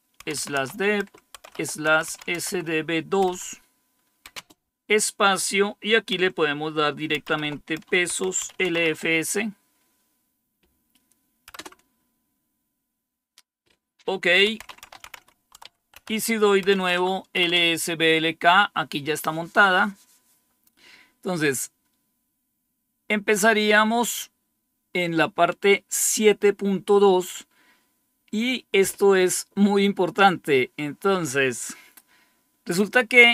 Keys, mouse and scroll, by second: 0.0-2.3 typing, 4.2 typing, 8.0-8.6 typing, 11.4 Return, 14.2-16.6 typing, 16.8 Tab, 17.3 Return, 23.4 click.